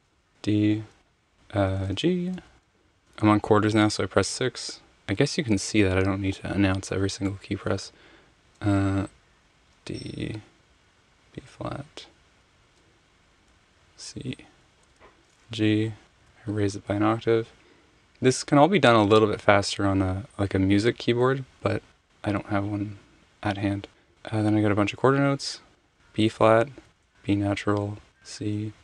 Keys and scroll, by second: 0.1 d, 2.3 g, 3.5 6, 9.0 d, 10.6 b, 12.6 7, 13.4 c, 14.8 g, 21.9 6, 25.8-28.8 typing.